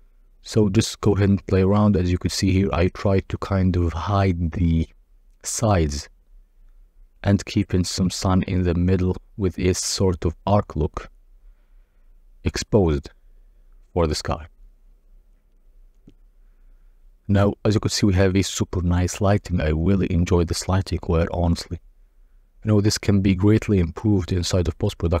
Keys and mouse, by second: 1.2 click, 1.6 g, 1.8 z, 2.9 click, 5.6-7.0 drag, 8.7-11.5 drag, 11.9-13.4 drag, 17.5 middle click, 22.4 click, 24.4 click.